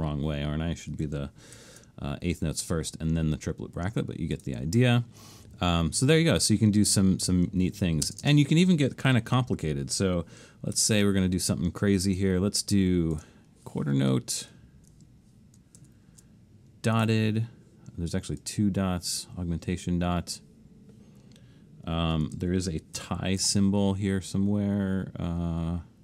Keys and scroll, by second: 1.6 alt+shift+super+s, 8.1 space, 10.8 alt+shift+super+s, 15.8 alt+shift+super+s, 23.0 alt+shift+super+s.